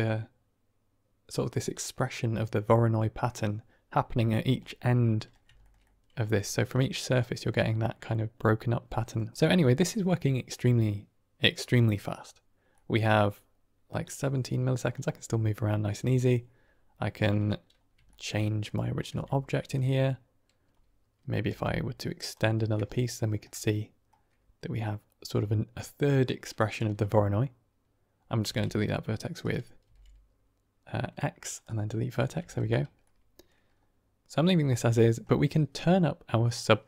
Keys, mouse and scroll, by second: 4.5-5.2 middle drag, 5.5 shift+middle drag, 5.7-6.3 middle drag, 6.6-7.0 middle drag, 8.0-9.1 middle drag, 9.4 middle click, 12.7 middle click, 14.9-15.6 middle drag, 18.0 shift+drag, 18.2 drag, 19.1 Tab, 19.8 click, 21.7 e, 22.3 click, 23.0 shift+click, 23.0-24.2 middle drag, 27.0 middle click, 28.6 z, 29.9 x, 31.7 typing, 32.4 Tab, 32.9-33.4 middle drag, 34.6 middle click, 36.2 middle click.